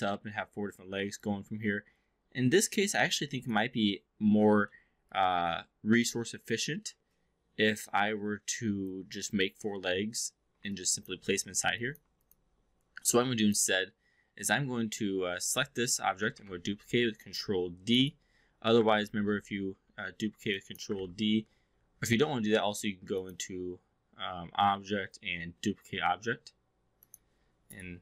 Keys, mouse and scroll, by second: 1.2-3.0 alt+drag, 3.4 click, 4.6-4.9 alt+middle drag, 5.1-8.9 alt+drag, 10.6-11.1 alt+drag, 11.7-12.0 alt+drag, 12.2 click, 13.4 click, 15.1 4, 16.4 ctrl+d, 18.9 ctrl+z, 19.7 w, 20.6 click, 21.0 ctrl+z, 23.2-27.9 drag.